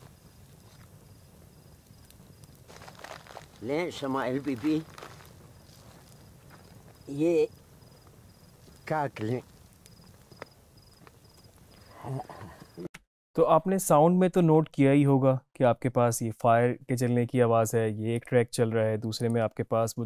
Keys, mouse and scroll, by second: 13.0 space, 18.2 click.